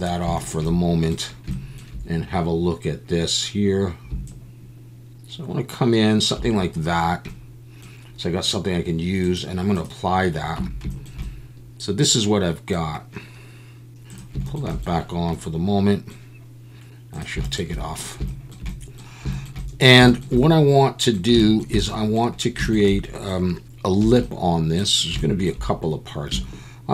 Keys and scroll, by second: 10.6 Tab, 24.0 3.